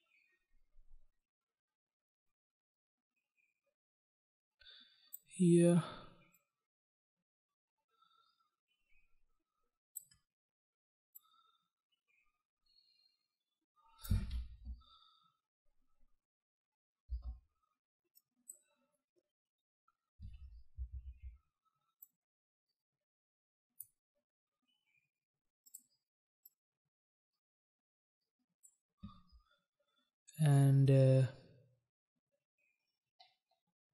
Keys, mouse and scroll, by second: 6.6 click, 11.4 click, 14.7 space, 17.3 space, 18.4 click, 21.0 ctrl+z, 22.2 click, 25.9 click, 26.0 click, 26.6 click.